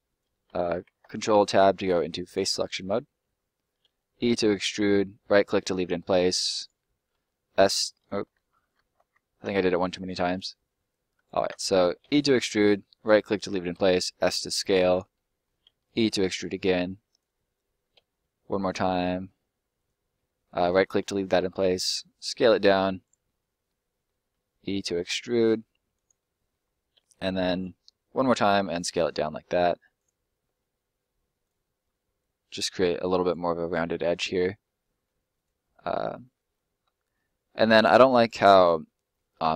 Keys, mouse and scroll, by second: 2.2 click, 2.7 right click, 3.8 e, 4.7 right click, 6.1 e, 6.5 right click, 7.1 s, 7.9 right click, 8.2 ctrl+right click, 8.3 ctrl+z, 8.7 ctrl+z, 9.7 middle click, 10.3 click, 11.4 ctrl+z, 11.9 e, 12.9 right click, 13.7 s, 14.9 click, 15.2 middle click, 15.6 e, 17.0 click, 17.9 e, 19.7 right click, 20.1 middle click, 21.4 s, 23.0 click, 23.2 middle click, 24.2 e, 25.9 click, 26.1 middle click, 26.9 e, 27.6 click, 28.3 s, 30.0 click, 30.4 s, 31.4 click, 34.6 middle click, 35.3 right click, 35.8 middle click.